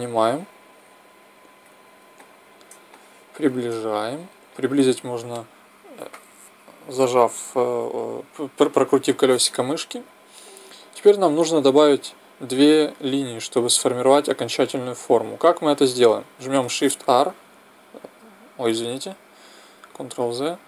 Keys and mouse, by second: 0.0-2.2 drag, 2.2-7.5 middle drag, 17.1 shift+r, 19.8 ctrl+z.